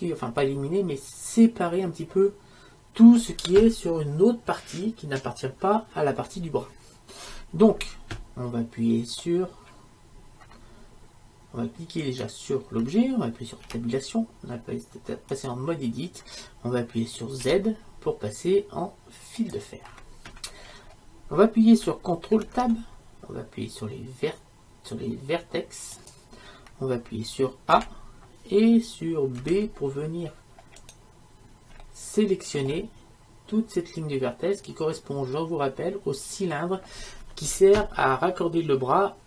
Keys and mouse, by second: 12.1-13.9 right drag, 13.9 Tab, 17.5 z, 21.0-25.8 middle drag, 22.5 ctrl+Tab, 27.8 a.